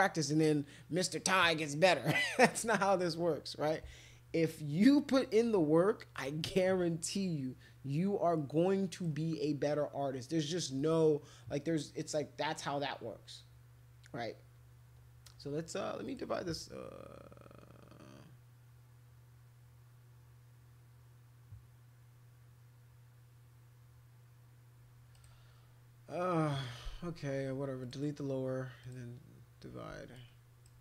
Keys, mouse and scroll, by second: 4.8 click, 6.1 click, 8.4 click, 10.8 click, 12.5 click, 16.1 click, 25.1 click, 27.8 click, 28.8 click, 30.1 click.